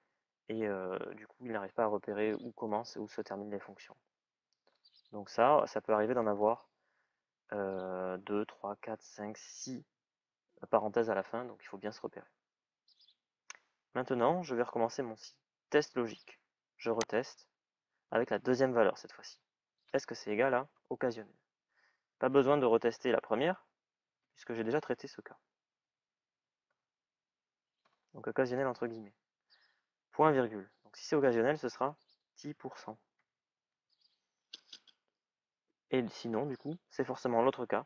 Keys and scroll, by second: 22.1-24.9 typing, 26.1 shift+e, 26.4 shift+l, 32.9 shift+à, 33.5 shift+ù, 37.7 shift+é.